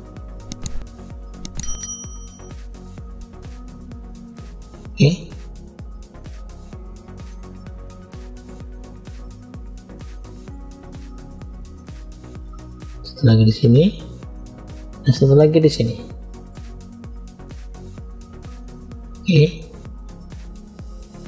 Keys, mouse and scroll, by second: 1.9 scroll down 2, 2.6 middle click, 2.6 scroll down 1, 3.9-4.4 scroll up 1, 4.5 shift+middle click, 5.5-6.1 scroll up 2, 6.1 middle click, 7.1-8.4 middle drag, 8.9 click, 10.3 click, 11.6 middle click, 12.8 click, 14.2 middle click, 14.2 scroll up 1, 15.7 click, 18.6 middle click, 19.8 click, 20.8 click.